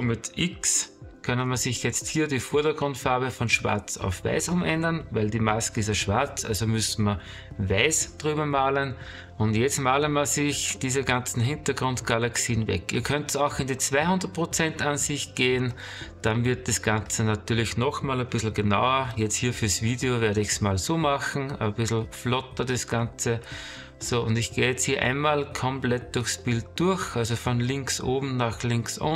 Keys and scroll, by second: 11.2 space, 12.6 space, 15.5 space, 18.5 ctrl+-, 18.9 space, 20.9 space, 22.0 space, 23.8 space, 26.6 space.